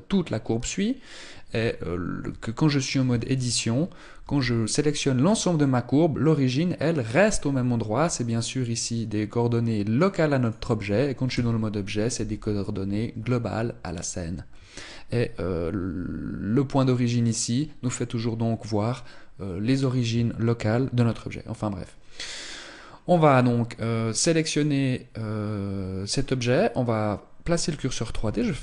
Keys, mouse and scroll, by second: 2.0 Tab, 2.8 a, 3.0 a, 3.9 g, 10.2 click, 11.0 Tab, 11.4 g, 22.2 right click, 23.6 right click, 25.8 right click, 28.2 shift+s.